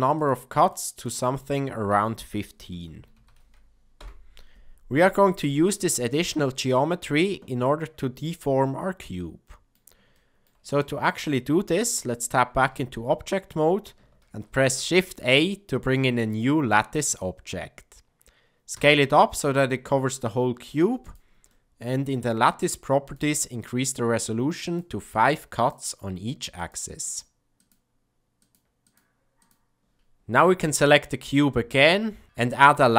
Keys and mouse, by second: 0.1 click, 0.6 click, 0.9 click, 1.4-4.6 drag, 6.7-9.7 middle drag, 10.1 ctrl+middle click, 10.8 shift+middle click, 12.5 Tab, 14.2 shift+a, 16.2 middle click, 18.7 s, 21.4-22.0 middle drag, 23.1 click, 25.1 click, 26.5 click, 27.0 click, 27.6 click, 28.3 click, 28.8 click, 30.8 click.